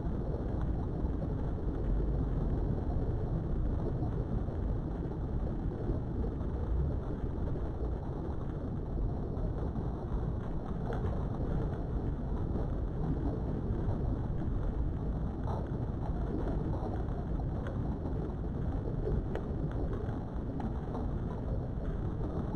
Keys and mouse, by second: 1.3 click, 1.8 g, 2.6 click, 4.6 ctrl+r, 7.7 click, 9.9 Tab, 10.8 KP_7, 12.1 Tab, 13.7 a, 14.6 s, 14.8 x, 20.2 click, 21.5 shift+middle click, 22.0 Tab.